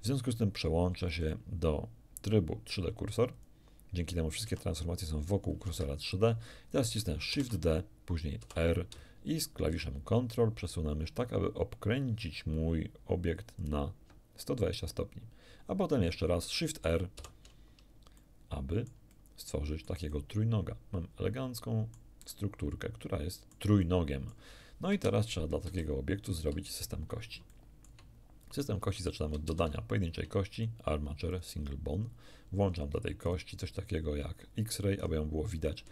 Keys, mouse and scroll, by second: 1.2 click, 3.4 click, 4.4 r, 5.7 Escape, 7.3 shift+d, 8.4 r, 13.6 ctrl+click, 17.2 shift+r, 18.2-20.0 shift+middle drag, 23.8 middle click, 24.9 1, 25.6 a, 26.4 z, 27.1 scroll down 2, 27.5 shift+middle click, 29.5 shift+a, 30.6 click, 31.3 click, 33.2 click, 35.0 scroll up 1.